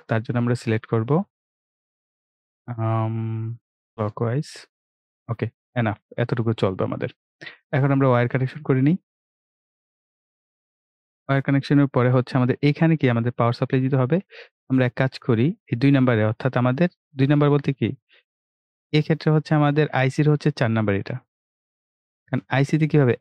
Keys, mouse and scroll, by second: 5.9 click, 8.3 click, 10.9 right click, 14.5 click, 21.0 click.